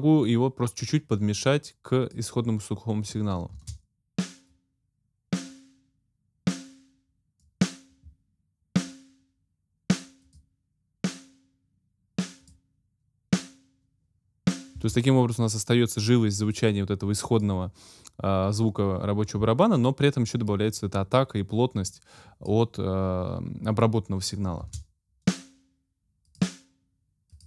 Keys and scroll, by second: 3.5 space, 14.7 space, 24.6 space.